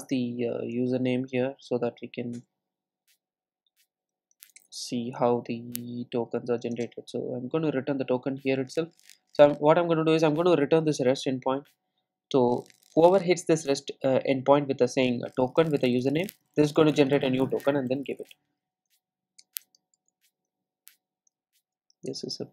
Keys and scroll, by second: 4.6 Return.